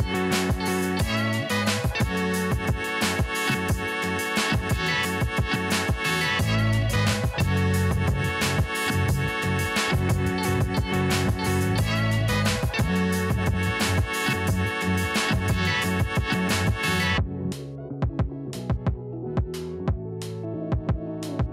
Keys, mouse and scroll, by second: 0.2-1.0 typing, 4.4 ctrl+z, 5.0 click, 6.3-7.1 typing, 10.1 alt+scroll up 1, 10.6 scroll up 1, 10.9 alt+scroll down 1, 11.3 alt+scroll up 1, 11.4 right click, 11.8-14.0 drag, 17.7 click, 18.5 alt+scroll up 1, 19.6 Left, 21.0 scroll up 1.